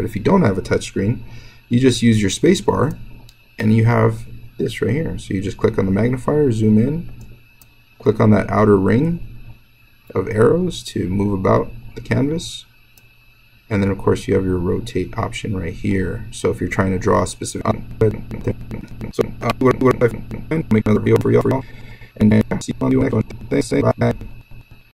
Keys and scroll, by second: 2.8-7.0 space, 7.5-20.4 space.